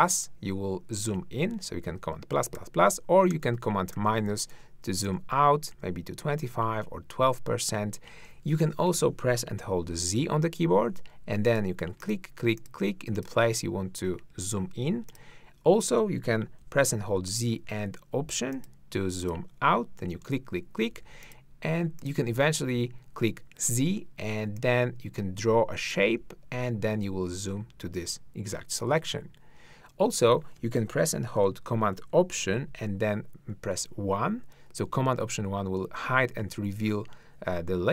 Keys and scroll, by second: 1.1 super+=, 2.6 super+-, 9.9 z, 16.6 z, 20.9 z, 22.7 z, 33.5 alt+super+i, 36.0 alt+super+1.